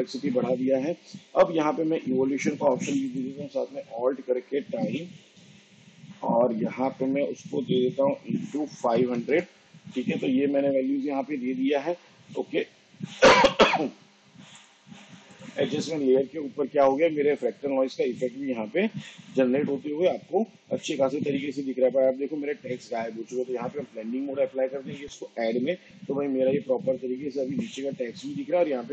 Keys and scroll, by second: 4.5-5.8 typing, 8.4 shift+8, 8.9 5.